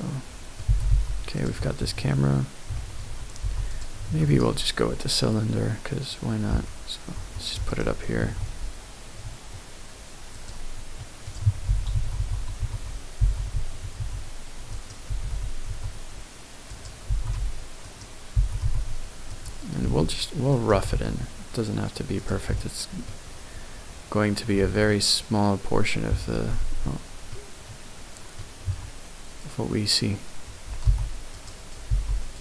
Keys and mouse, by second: 0.2 middle click, 0.6 g, 0.9 y, 1.4 click, 1.6 middle click, 2.7 shift+middle click, 3.4 x, 4.0 shift+a, 7.7 shift+right click, 8.2 shift+a, 11.0 middle click, 11.6-14.0 typing, 14.7 right click, 15.1 r, 15.2 x, 15.7 z, 16.7 click, 17.1 g, 17.2 x, 17.8 right click, 18.3 g, 18.6 y, 19.3 click, 19.8 s, 20.5 right click, 20.7 s, 20.9 x, 22.2 click, 24.9-26.3 middle drag, 26.7 ctrl+z, 27.3-27.7 middle drag, 27.8 middle click, 28.7 Tab, 30.8 ctrl+r, 31.9 g.